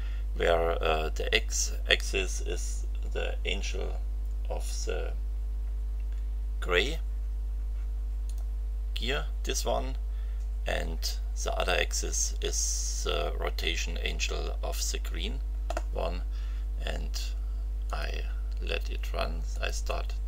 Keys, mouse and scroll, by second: 8.2 click, 17.8 click, 19.5 click.